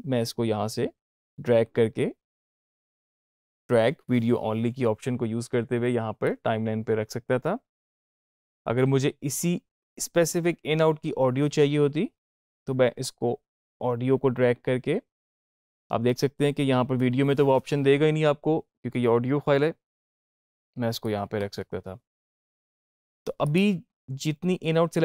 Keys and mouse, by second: 1.2-8.3 drag, 12.8-23.0 drag.